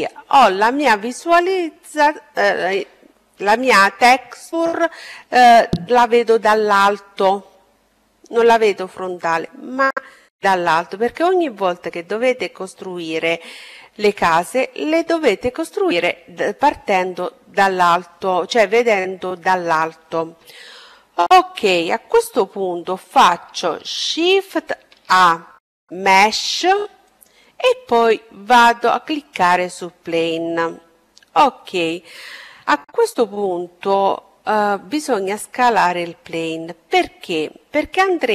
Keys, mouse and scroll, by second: 19.7-23.5 middle drag, 23.5 shift+a, 38.1-38.3 drag.